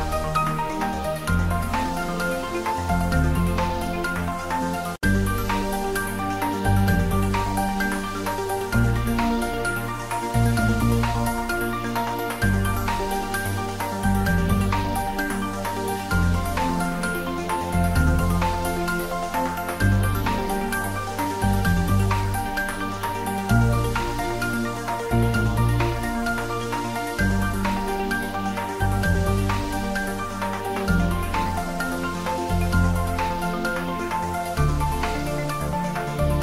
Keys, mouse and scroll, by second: 2.0 click, 9.0 click, 10.9-13.5 middle drag, 13.5 right click, 14.2 click, 16.7 click, 17.8-22.3 typing, 19.3 click, 21.1 click, 21.4 middle click, 25.3 click, 25.5-26.4 typing, 26.6 ctrl+middle click, 27.3 click, 27.8 ctrl+middle click, 28.2 r, 29.3 click, 29.7-32.1 typing, 30.6 click, 32.8 click, 33.2 s, 33.7 click, 33.9 g, 34.2 z, 35.1 click, 35.4 r, 36.0 Down.